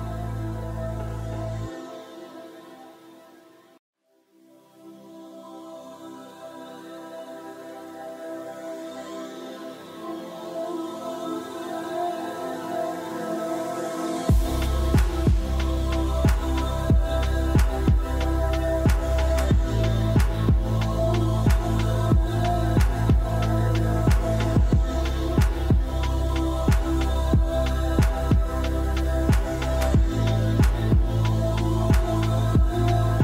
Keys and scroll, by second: 25.5 r.